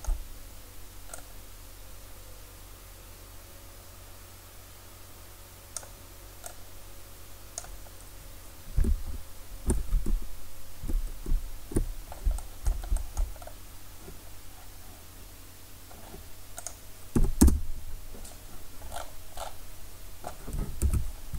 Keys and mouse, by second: 1.2-8.8 drag, 8.9-9.7 ctrl+KP_1, 10.1-10.9 ctrl+KP_3, 11.3 KP_3, 16.6-18.4 drag, 20.9 ctrl+z.